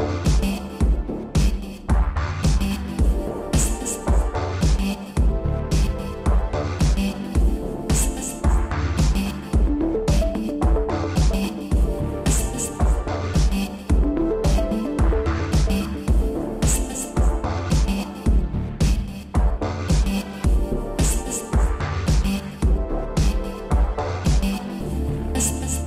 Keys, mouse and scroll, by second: 0.5 Down, 0.9 shift+space, 2.0 Escape, 2.3 space, 2.9 shift+space, 3.5 Escape, 3.9 shift+space, 5.2 scroll down 2, 5.4 middle click, 5.8 shift+space, 6.2 Escape, 7.0 shift+Left, 7.4 shift+space, 8.1 Escape, 9.5 click, 11.1 click, 12.5 ctrl+z, 13.2 click, 14.9 click, 17.6 scroll up 2, 18.2 7, 19.1 Down, 20.2 Right, 20.4 Right, 20.6 Right, 22.7 ctrl+c, 22.8 Right, 23.2 ctrl+v, 23.9 shift+Left, 24.9 middle click.